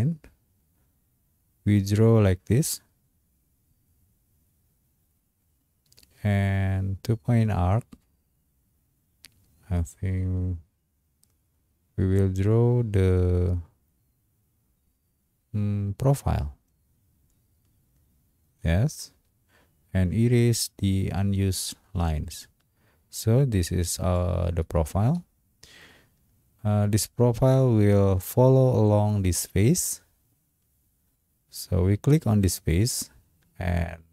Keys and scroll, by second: 25.1 space.